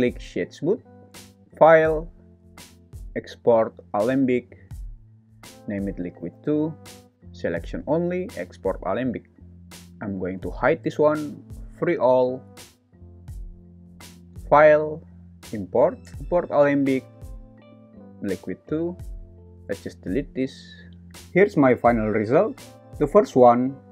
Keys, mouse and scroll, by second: 1.2-4.2 drag, 10.4 h, 11.8 click, 14.2-16.0 drag, 18.7 space, 19.4 space, 19.8 x, 20.5 space.